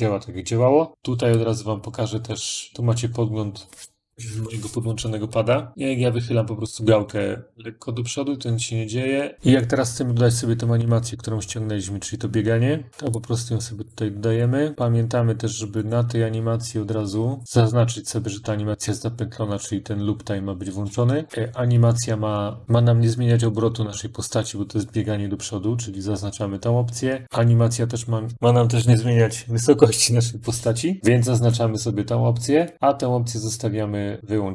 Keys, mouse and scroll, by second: 1.3-4.1 drag, 9.3 click, 10.8 scroll down 1, 11.2-11.7 scroll up 1, 11.7-12.2 scroll up 1, 12.2-13.1 scroll down 2, 13.7 click, 14.7 scroll, 14.7 click, 15.7 click, 17.4-18.4 scroll down 2, 34.2 scroll down 1.